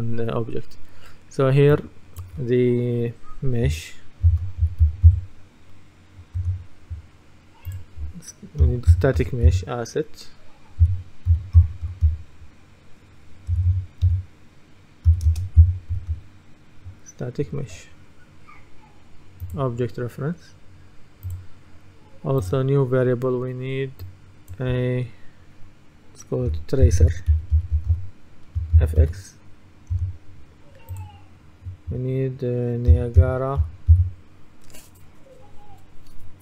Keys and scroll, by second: 4.1-5.6 typing, 6.5 Return, 8.5-10.0 typing, 11.1-12.6 typing, 13.6 BackSpace, 15.2-16.0 typing, 26.6-28.8 typing, 30.0 Return, 33.0-34.5 typing.